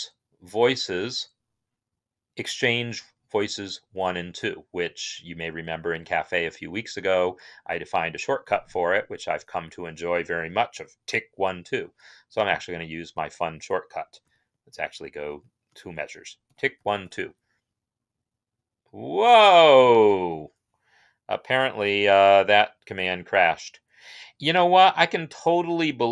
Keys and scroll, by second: 14.2 shift+Right, 14.6 shift+Right, 15.1 shift+Right, 16.6 typing, 18.8-19.5 typing.